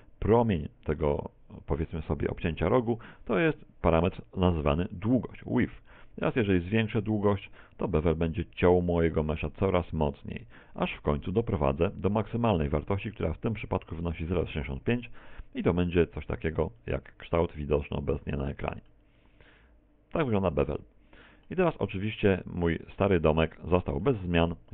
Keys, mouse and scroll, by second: 5.1 click, 15.2 middle click, 16.8 middle click, 21.6 Tab, 22.3 middle click, 24.3 a, 24.5 z.